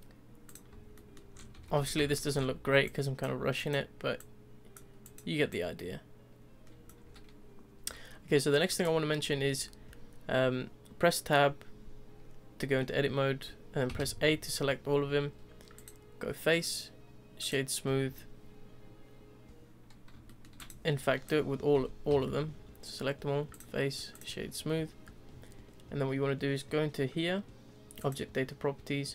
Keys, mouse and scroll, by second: 0.5 click, 0.9-1.3 shift+middle drag, 1.3 scroll up 2, 1.5 Tab, 1.8 z, 2.0-2.4 shift+middle drag, 2.4-2.8 scroll up 1, 2.8 click, 3.6 click, 4.2 click, 5.0 click, 5.5 click, 6.8 shift+middle click, 7.0-8.7 scroll up 1, 8.7 click, 9.3 Tab, 13.9 a, 15.7-18.0 drag, 18.0 Tab, 20.2-20.6 shift+middle drag, 20.6 click, 21.0 click, 21.7 Tab, 22.1 a, 23.5-24.5 drag, 24.5 Tab, 28.0 click.